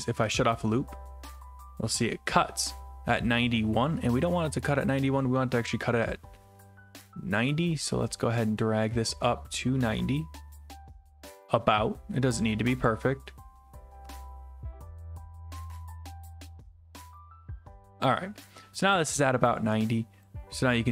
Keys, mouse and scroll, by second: 0.4 click, 18.0 click, 20.3 click.